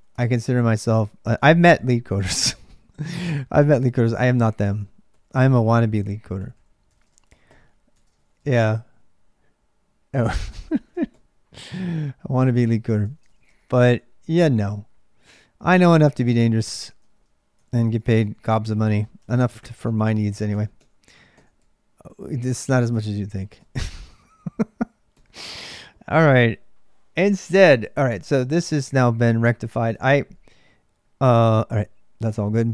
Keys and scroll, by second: 0.0-32.7 typing, 16.9 ctrl+[, 17.4 ctrl+[, 22.3 ctrl+[, 27.7 ctrl+[, 29.7 Return.